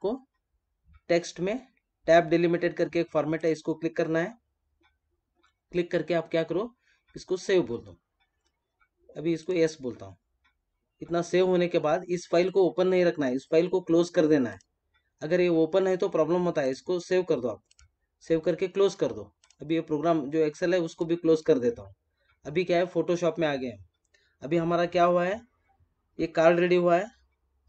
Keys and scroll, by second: 21.1 space.